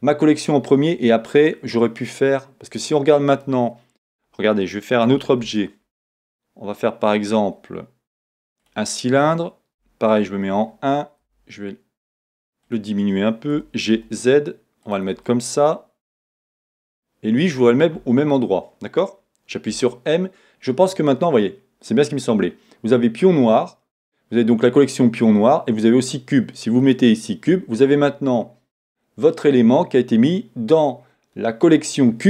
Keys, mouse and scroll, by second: 8.7 shift+a, 9.8 KP_1, 11.3 KP_5, 12.7 s, 12.8 click, 13.6 g, 15.0 click.